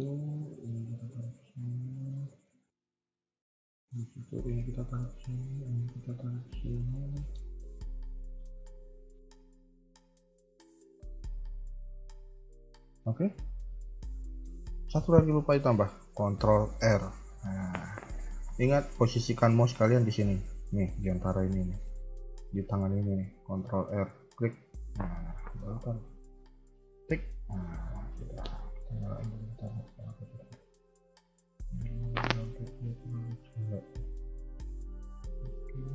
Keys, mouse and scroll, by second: 0.7 click, 0.9 g, 2.4 middle click, 4.2 click, 4.3 g, 5.3 click, 5.5 g, 6.7 middle click, 8.3 middle click, 12.7 KP_1, 13.6 a, 14.0 a, 14.1 shift+middle click, 16.7 ctrl+r, 23.6 ctrl+r, 27.3-28.8 scroll down 1, 28.8 click, 30.0 click, 30.0 scroll up 1, 30.7 g, 34.2 click, 35.3 g.